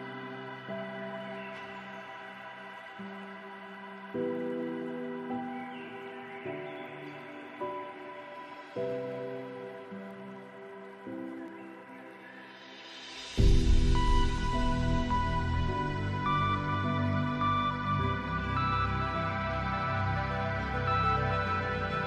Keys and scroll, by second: 11.0 ctrl+space, 16.4 ctrl+z.